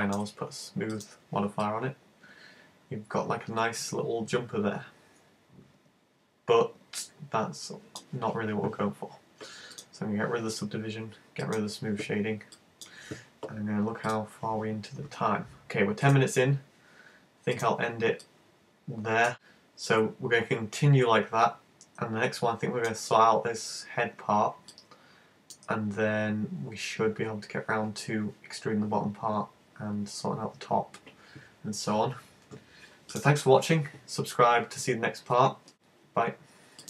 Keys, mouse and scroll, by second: 0.9 click, 1.6 middle click, 9.7 click, 11.5 click, 11.9-12.6 scroll up 1, 12.6 middle click, 17.6 click, 18.2 middle click, 24.8 middle click.